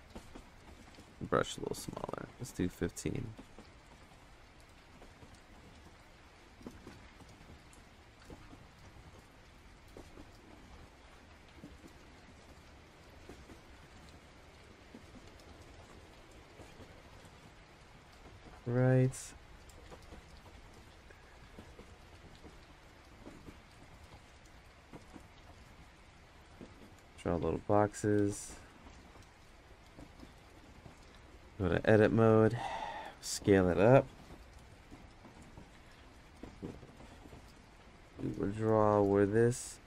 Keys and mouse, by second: 1.0 click, 1.9 click, 2.3-5.1 drag, 5.3 ctrl+z, 5.5 click, 6.4-7.7 drag, 8.3 click, 9.4 click, 11.4 click, 12.6 click, 13.4 ctrl+z, 14.2 click, 15.4-16.9 drag, 20.2 click, 21.1 click, 22.0 click, 23.6 click, 24.8 ctrl+z, 25.3 click, 27.1 click, 28.3 ctrl+z, 31.4 Tab, 31.8-32.1 drag, 34.1 s, 34.1 g, 35.2 Tab, 36.7 click, 38.2 click, 38.8 click, 39.2 click, 39.5 click.